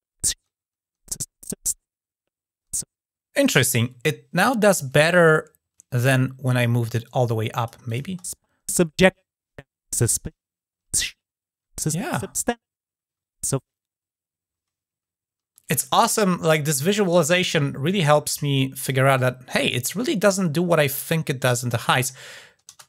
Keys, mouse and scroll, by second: 6.8-7.4 drag, 7.6 click, 17.6-18.7 drag, 18.9 click, 21.6 click.